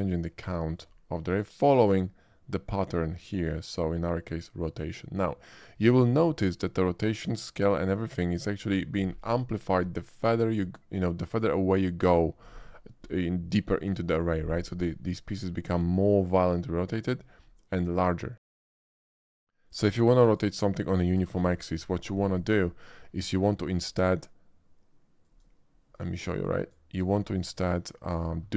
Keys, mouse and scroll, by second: 1.6-3.7 shift+drag, 6.1-6.4 shift+middle drag, 6.6-7.6 shift+middle drag, 19.0 g, 19.0 x, 19.3 shift+a, 20.2 click, 21.1 g, 21.3 y, 21.4 g, 21.9 click, 22.4 middle click, 23.0 shift+middle click, 23.7 shift+click, 25.2 shift+click, 26.3-26.7 drag, 27.3-28.1 drag.